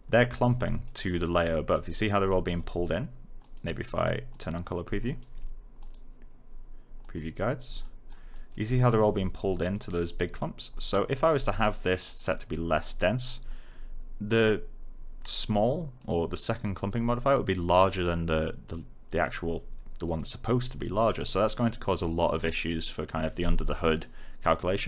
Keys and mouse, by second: 0.6 alt+middle click, 1.1 alt+click, 1.9 right click, 2.2 alt+middle click, 3.3 click, 4.9 alt+right click, 5.7 click, 8.3 right click, 8.7 middle click, 9.1 click, 9.7 right click, 10.1 alt+middle click, 10.7 click, 15.9 click, 20.0 click, 22.0 click.